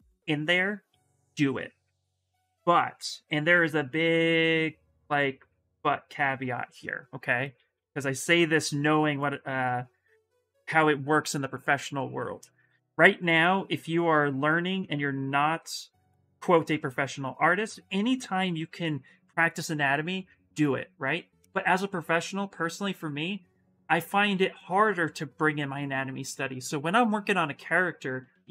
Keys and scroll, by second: 0.6 s, 7.2 ctrl+z, 7.5 s.